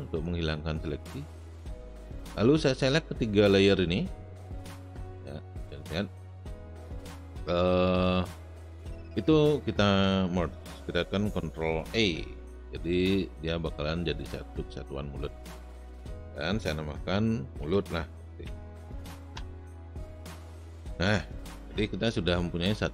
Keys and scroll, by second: 11.9 ctrl+e, 17.3-18.9 typing, 19.3 Return.